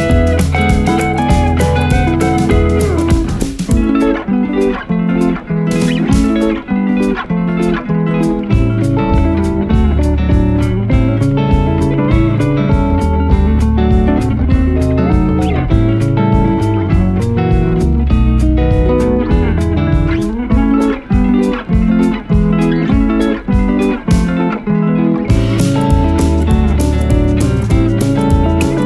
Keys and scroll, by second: 8.3 ctrl+8.